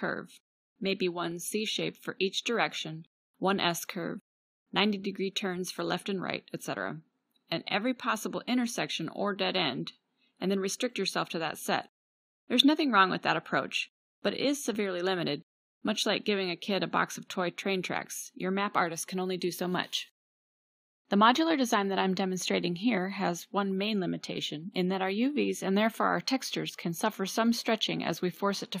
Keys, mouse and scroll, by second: 3.4 middle drag, 3.6 middle click, 4.6-5.0 middle drag, 11.0 =, 16.5 Tab, 22.5 middle click, 23.2 ctrl+r, 27.2 middle click.